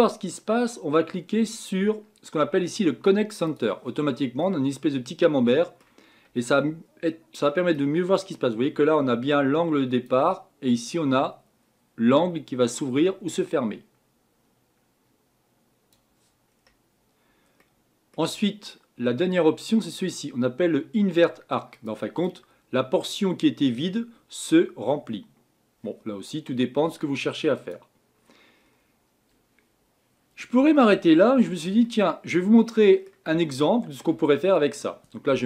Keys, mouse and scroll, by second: 3.5 click, 4.5-6.2 middle drag, 6.2-8.0 scroll down 1, 8.0-13.9 drag, 21.7 click, 27.6 click, 28.7-29.1 scroll down 4, 30.8-35.3 shift+middle drag, 35.3 KP_7.